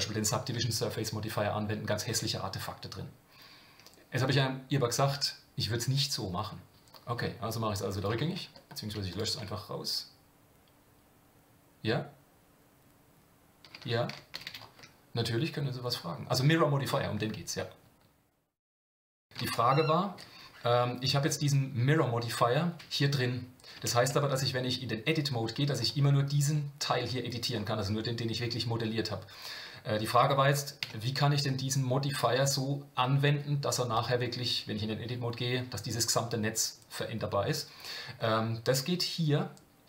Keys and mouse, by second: 14.4 ctrl+z, 24.0 Tab, 24.6 middle click, 25.9-27.3 drag, 30.8 Tab.